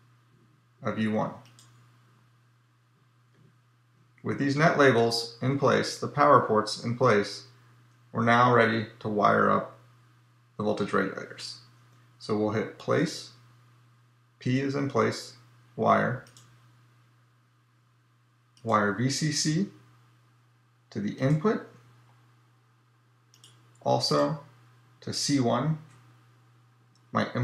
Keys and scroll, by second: 12.7 p.